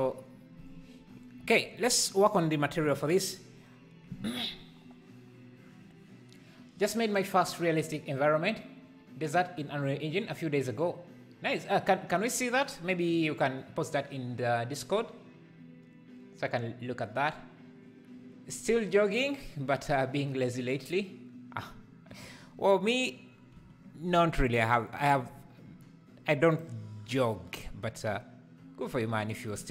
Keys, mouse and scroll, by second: 1.9 click, 24.9 click, 26.6-29.5 drag.